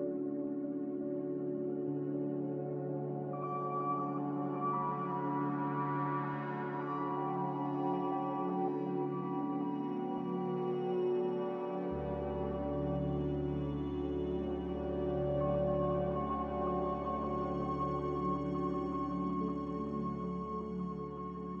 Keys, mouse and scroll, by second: 8.5 Escape.